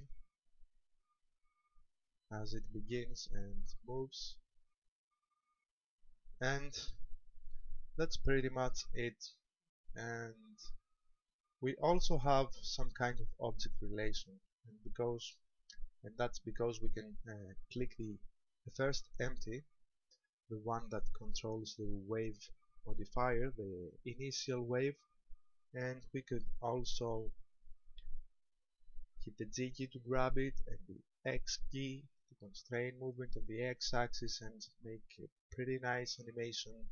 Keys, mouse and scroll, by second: 15.0 right click, 30.3 g.